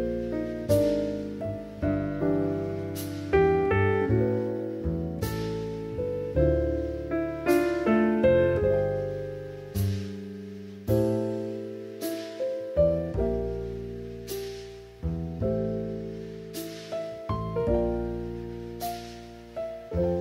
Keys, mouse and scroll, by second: 0.3 ctrl+z, 3.1 shift+middle click, 3.7 middle click, 4.5-5.7 middle drag, 7.5 click, 8.0 KP_3, 9.2 click, 9.8 click, 11.9 click, 13.7-17.7 drag, 19.0 click, 19.7 click.